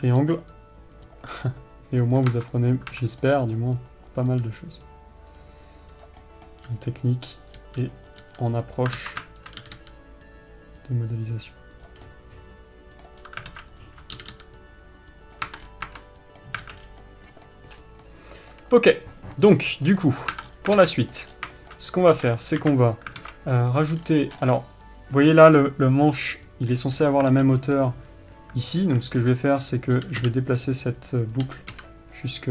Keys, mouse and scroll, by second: 1.8-4.6 middle drag, 6.6-7.6 middle drag, 12.4-14.2 middle drag, 16.4-29.1 middle drag.